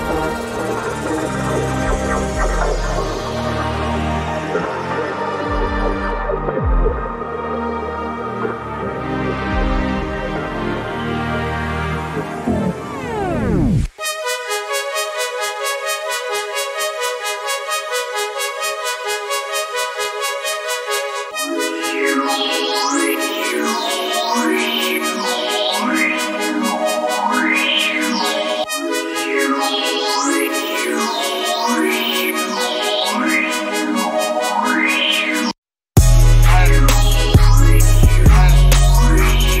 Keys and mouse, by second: 0.0-9.9 typing, 0.0 ctrl+z, 1.7 middle click, 1.8 Tab, 2.0 shift+middle click, 2.1 Tab, 2.2 middle click, 2.7 Tab, 2.8 click, 2.9 click, 3.1 Tab, 3.1 ctrl+r, 3.3 ctrl+r, 3.4 ctrl+r, 3.9 ctrl+r, 4.1 ctrl+z, 4.1 middle click, 5.1 middle click, 5.4 click, 6.4 alt+2, 6.9 Tab, 7.0 middle click, 7.6 middle click, 7.7 Tab, 7.8 Tab, 8.1 shift+middle click, 8.2 click, 8.4 ctrl+e, 8.4 ctrl+r, 8.4 shift+click, 9.0 click, 9.0 Tab, 9.3 click, 9.4 click, 9.4 Tab, 9.6 Tab, 9.6 Tab, 9.9 ctrl+r, 10.0 Tab, 10.1 click, 10.2 middle click, 10.3 right click, 10.4 middle click, 10.6 shift+middle click, 10.7 ctrl+s, 11.2 middle click, 11.2 ctrl+1, 11.3 middle click, 11.7 click, 19.1 middle click, 19.2 Tab, 19.4 Tab, 19.5 middle click, 21.5 Tab, 23.9 shift+middle click, 24.0 shift+middle click, 24.1-28.7 typing, 24.4 shift+middle click, 24.5 click, 24.6 Tab, 24.7 Tab, 24.9 click, 25.0 click, 25.3 middle click, 25.6 Tab, 25.6 click, 25.7 ctrl+r, 26.2 alt+click, 26.5 click, 27.6 ctrl+r, 27.7 ctrl+r, 27.9 click, 28.2 click, 28.4 middle click, 28.5 click, 28.6 middle click, 29.0 middle click, 29.1 middle click, 29.3 middle click, 29.3 click, 29.4 middle click, 29.5 ctrl+z, 29.7 shift+click, 29.9 middle click, 29.9 click, 30.1 middle click, 30.1 alt+3, 30.2 2, 30.3 click, 30.4 middle click, 30.5 ctrl+z, 30.5 click, 30.6 middle click, 31.0 Tab, 31.0 middle click, 31.1 middle click, 31.3 Tab, 31.4 Tab, 31.4 a, 31.4 Tab, 31.5 click, 31.5 KP_1, 31.7 Tab, 31.8 ctrl+z, 31.8 ctrl+z, 32.0 Tab, 32.0 click, 32.2 ctrl+r, 32.2 ctrl+e, 32.4 ctrl+e, 32.4 ctrl+r, 32.5 ctrl+r, 32.5 middle click, 32.8 middle click, 32.8 o, 32.9 middle click, 33.0 Tab, 33.0 click, 33.1 Tab, 33.2 3, 33.2 click, 33.4 middle click, 33.5 Tab, 33.6 Tab, 33.6 middle click, 33.7 click, 34.1 middle click, 34.2 ctrl+z, 34.3-36.9 typing, 34.4 click, 34.8 Tab, 34.8 middle click, 35.0 Tab, 35.1 Tab, 35.1 click, 35.2 Tab, 35.4 click, 35.8 shift+right click, 35.9 Tab, 36.2 click, 36.3 click, 36.5 middle click, 36.7 Tab, 36.7 ctrl+e, 36.8 ctrl+r, 37.1 click, 37.1 middle click, 37.2 middle click, 37.3 click, 37.4 ctrl+e, 37.5 ctrl+r, 37.5 click, 37.7 middle click, 37.8 ctrl+r, 38.0 Tab, 38.1 click, 38.2-39.6 typing, 38.3 click, 38.5 click, 38.5 Tab, 38.6 click, 38.7 Tab, 38.9 click, 39.2 click, 39.4 click.